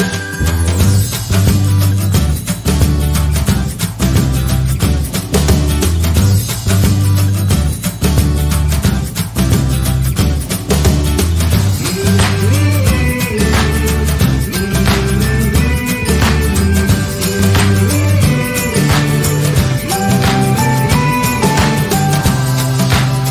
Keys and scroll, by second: 1.9 Left, 2.6 Up, 3.0 Up, 3.0 Left, 6.0 ctrl+a, 6.2-11.0 typing.